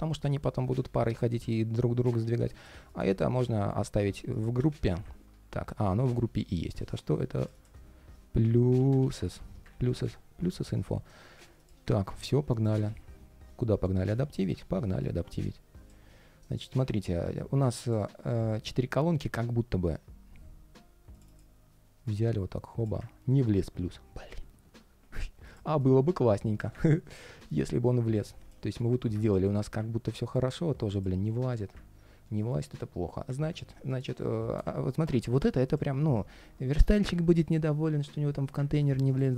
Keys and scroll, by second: 1.9 super+z, 3.4 alt+i, 9.4 super+s, 10.3 super+], 12.6 super+s, 13.2 ctrl+shift+3.